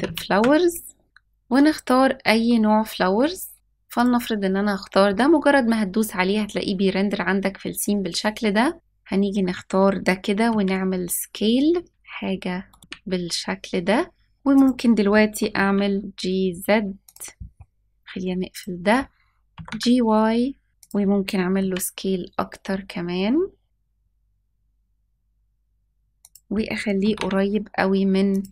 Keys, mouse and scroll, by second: 8.7 click, 10.4 s, 11.9 s, 12.8 s, 15.2 g, 19.4 g, 20.7 g, 21.4 s, 23.6 g, 26.9 g.